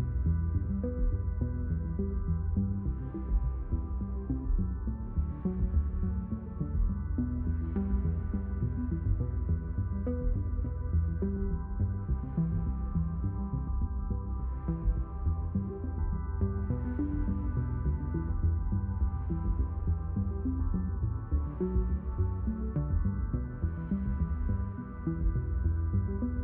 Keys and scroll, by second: 2.0 Down.